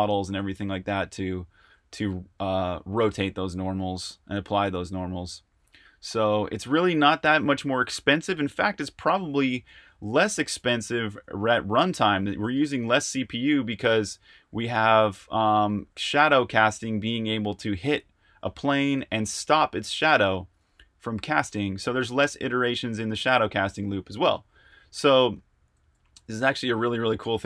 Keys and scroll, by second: 0.0-17.2 typing, 18.9-27.4 typing.